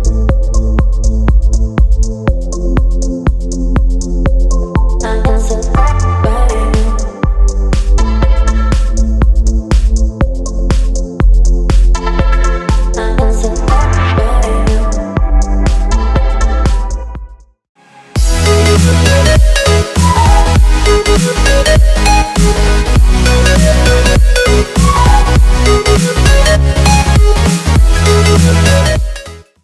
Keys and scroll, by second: 5.2 v, 7.3 z, 9.2 v.